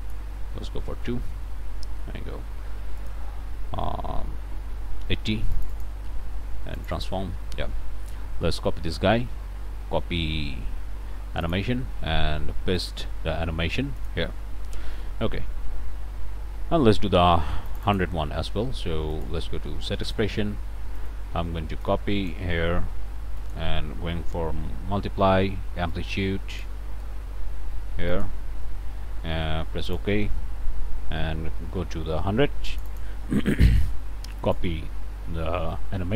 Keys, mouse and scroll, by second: 0.7 2, 1.0 Return, 3.0 click, 5.5 click, 6.8 click, 8.8 click, 11.4 click, 12.8 click, 14.0 click, 17.7 click, 19.1 click, 20.1-21.3 drag, 21.9-24.3 ctrl+drag, 25.9 ctrl+click, 28.1 click, 28.5 BackSpace, 29.9 click, 32.7 click, 34.4 click.